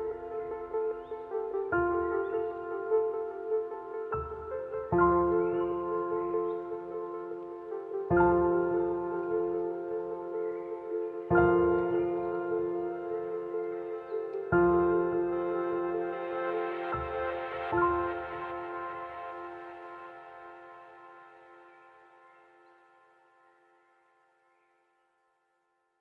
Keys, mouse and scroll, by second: 1.4 click, 5.0 BackSpace, 7.6 click, 7.7 click, 12.7 ctrl+t, 14.1 alt+shift+click, 14.1-17.5 alt+shift+drag, 17.8-20.2 shift+drag, 22.3 alt+scroll down 2, 23.0-24.1 scroll down 1.